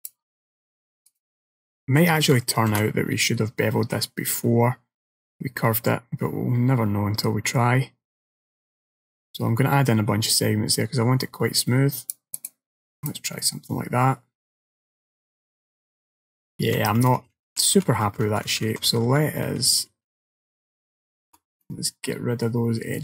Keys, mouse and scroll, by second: 0.1 alt+shift+click, 1.1 alt+shift+click, 1.7 middle click, 2.8 ctrl+b, 12.4 right click, 13.1 click, 13.5 middle click, 16.8 ctrl+z, 17.1 ctrl+z, 17.3 ctrl+z, 17.4 ctrl+z, 17.7 ctrl+z, 17.9 ctrl+z, 18.1 ctrl+z, 18.3 ctrl+z, 18.5 ctrl+z, 18.7 ctrl+z, 19.0 ctrl+z, 19.1 ctrl+z, 19.3 ctrl+z, 19.5 ctrl+z, 19.8 ctrl+z, 20.0 ctrl+z, 20.2 ctrl+z, 20.4 ctrl+z, 20.7 ctrl+z, 21.7 middle click.